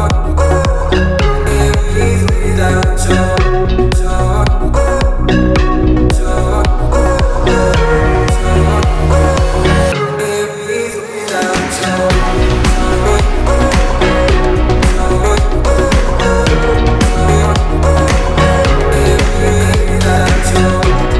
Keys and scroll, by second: 2.4 m, 6.2 Left, 7.8 Right, 12.0 q, 18.4 t, 20.9 Left.